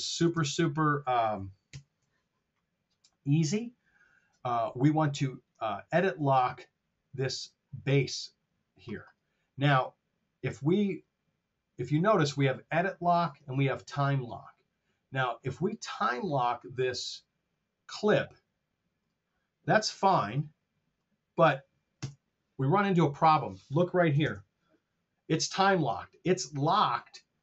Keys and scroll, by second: 0.4 super+Tab, 1.5 ctrl+alt+super+Down, 22.1 BackSpace, 24.1 super+z.